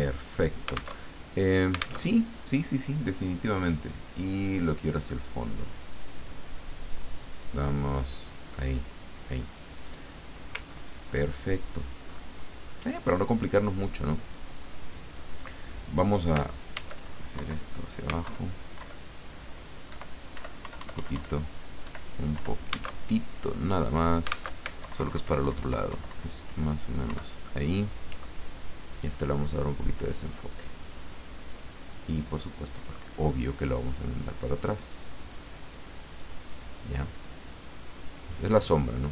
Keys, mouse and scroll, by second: 0.9 alt+Tab, 2.0 alt+Tab, 3.6 click, 4.0 click, 4.5 click, 5.9 click, 6.4 click, 6.7 middle click, 6.8 click, 10.7 ctrl+scroll down 2, 11.3 ctrl+scroll down 2, 12.1 ctrl+scroll up 2, 16.7 ctrl+d, 17.4 ctrl+Down, 18.2 alt+Up, 18.8 alt+Left, 19.9 alt+Right, 20.3 alt+Up, 21.8 alt+Right, 22.3 alt+Down, 23.0 alt+Tab, 24.5 alt+Tab, 24.8 alt+Left, 27.1 alt+Up, 30.2 click, 33.9 click, 34.4 click, 34.8 click, 35.2 click, 35.6 click, 36.1 click.